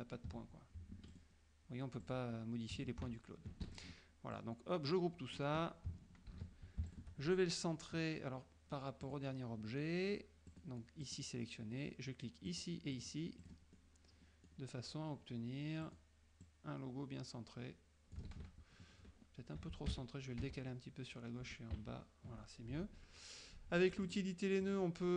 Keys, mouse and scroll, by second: 1.0 F2, 1.2 click, 2.1 click, 3.1 ctrl+z, 3.7 ctrl+F1, 3.8 ctrl+click, 4.4-5.6 drag, 6.4 ctrl+g, 7.0 ctrl+shift+click, 9.1 click, 10.6 click, 11.1 click, 12.6 click, 13.0 click, 13.5 click, 13.8 middle click, 15.9 click, 16.5-18.4 drag, 18.4 ctrl+z, 20.0 shift+Left, 21.5 shift+Down, 21.8 shift+Left, 24.1 click, 24.7 click.